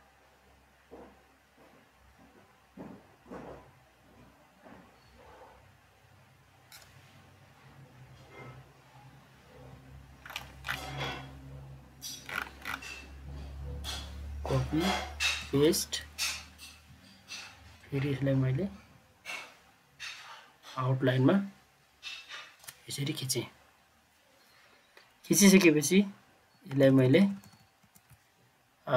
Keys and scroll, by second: 14.5 ctrl+c, 15.4 ctrl+v, 26.7 ctrl+Page_Down, 26.8 ctrl+Page_Down, 27.0 ctrl+Page_Down, 27.2 ctrl+Page_Down, 27.3 ctrl+Page_Down, 27.5 ctrl+Page_Down, 27.8 ctrl+Page_Down.